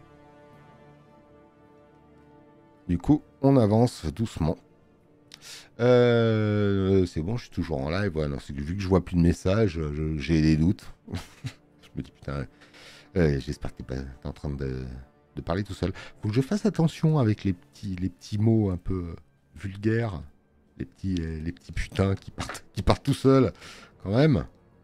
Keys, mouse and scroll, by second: 0.1 alt+scroll, 7.1 space, 23.3 space, 24.0 click.